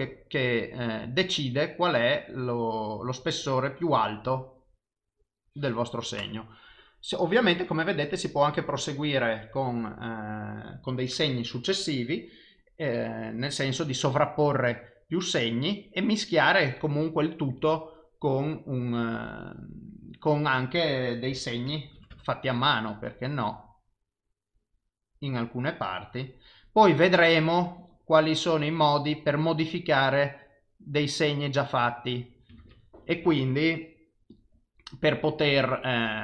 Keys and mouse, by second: 0.4 click, 13.2 click, 14.6 click, 16.2 click, 17.6 click, 21.3 f, 23.0 click, 23.9 click, 25.7 click, 27.7 click, 28.7 click, 30.3 click, 31.4 click, 32.6 ctrl+z, 34.3 click, 35.8 click.